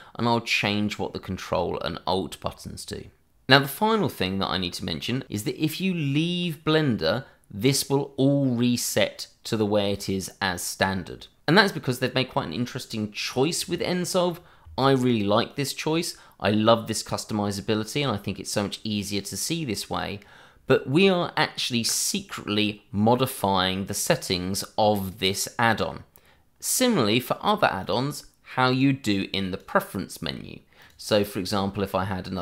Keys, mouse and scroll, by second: 26.7 click.